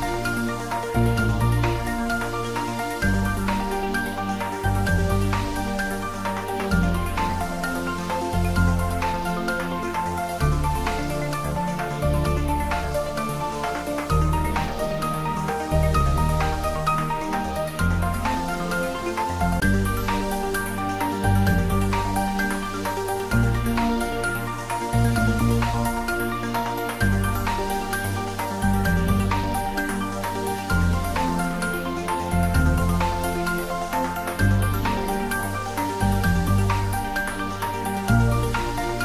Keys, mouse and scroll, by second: 0.9 click, 3.0 s, 7.8 s, 7.9 click, 16.1-17.8 scroll down 1, 18.6-20.4 scroll up 1, 22.4-28.8 drag.